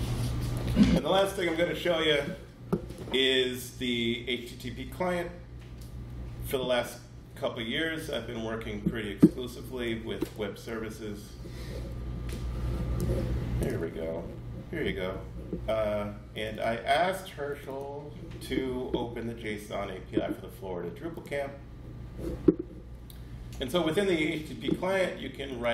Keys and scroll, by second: 10.8 Page_Up.